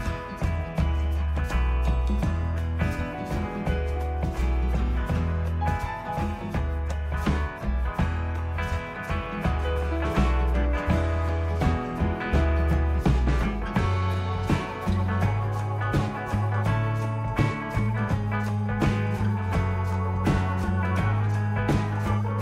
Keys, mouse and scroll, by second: 5.8 g, 8.4 click, 11.8 s, 14.1 g, 18.3 middle click, 22.0 right click.